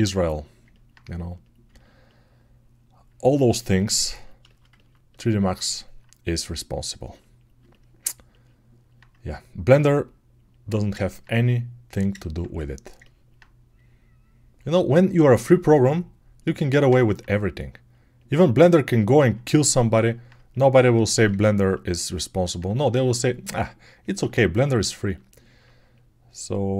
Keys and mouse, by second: 0.7-8.6 alt+right drag, 8.6-21.2 alt+drag, 20.1-24.2 right drag, 24.2-26.7 alt+shift+drag.